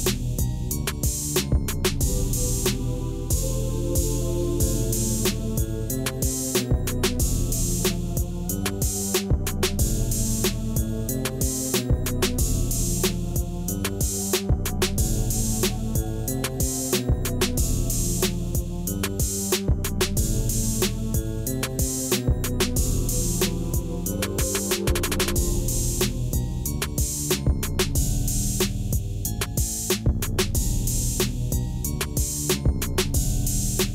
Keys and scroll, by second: 2.2 shift+z, 4.3 s, 5.2 Return, 5.6 shift+z, 7.9 s, 8.5 Return, 9.2 3, 12.6 Tab, 14.4 ctrl+2, 16.3 Tab, 17.9 Tab, 19.3 2, 20.4 1, 22.3 q, 25.0 g, 28.2 Tab, 29.8 Tab, 30.7 ctrl+r, 32.5 Tab, 33.3 alt+a.